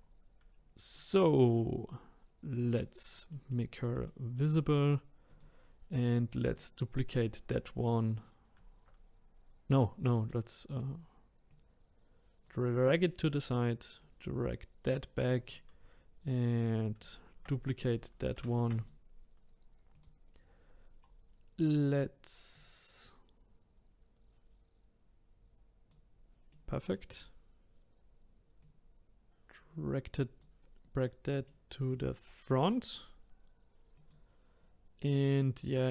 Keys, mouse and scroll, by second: 0.5-0.9 scroll up 1, 0.9-2.7 middle drag, 2.7 click, 3.3-4.4 middle drag, 4.4-5.3 scroll down 1, 5.3 click, 6.4 click, 10.1-11.5 middle drag, 11.5 click, 12.7 click, 13.1 middle click, 14.0 click, 15.3-18.4 middle drag, 18.4 shift+d, 19.9 click, 20.3-21.0 scroll up 3, 21.0-22.5 scroll down 1, 22.5 click, 26.5 middle click, 27.1-28.6 scroll down 1, 28.6 click, 31.0-33.9 middle drag, 33.9 click, 35.0-35.9 middle drag.